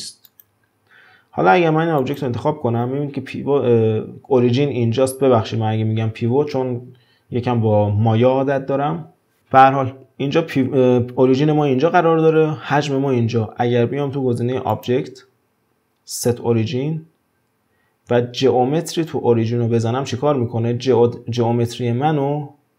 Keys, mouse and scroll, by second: 0.3 click, 2.0 click, 14.7-17.8 drag.